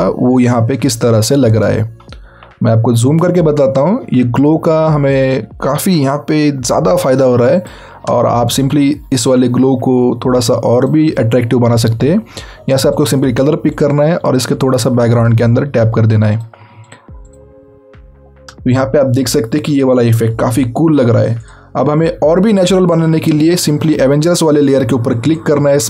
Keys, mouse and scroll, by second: 1.8 scroll up 1, 2.6 scroll down 1, 3.5-3.9 scroll down 1, 3.9 scroll up 1, 7.1 click, 8.2 alt+scroll down 1, 9.2 alt+click, 12.9 alt+click, 16.3 alt+click, 18.6-19.1 alt+scroll up 2, 19.1-21.4 alt+scroll down 2, 22.8 click, 25.3 click.